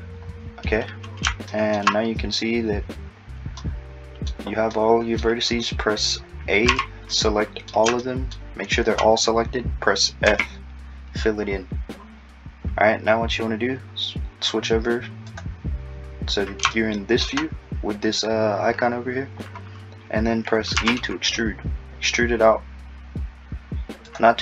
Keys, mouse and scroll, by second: 3.6 middle click, 6.7 a, 7.1 middle click, 10.3 f, 11.4-12.0 scroll down 2, 12.0-13.0 scroll up 2, 13.0-15.2 scroll down 1, 15.3 click, 16.8 shift+middle click, 19.6-20.5 scroll up 2, 20.8 e.